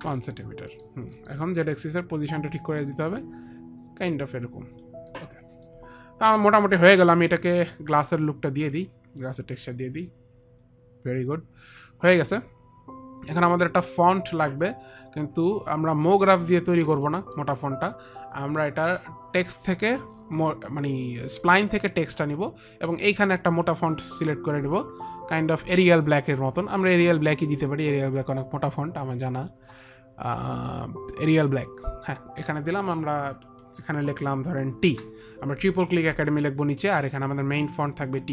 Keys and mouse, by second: 1.5 middle click, 5.3 click, 5.4 middle click, 5.7 click, 5.8 middle click, 8.4 click, 10.1 click, 11.6 alt+click, 12.6 alt+click, 14.9 alt+click, 17.4 alt+middle click, 17.4 alt+click, 17.9 alt+click, 18.5 alt+middle click, 19.1 alt+middle click, 19.9 alt+click, 22.7 click, 31.7 click, 33.1 click, 33.6 click, 35.2 click, 35.2 shift+t, 35.9 shift+t, 37.8 shift+t.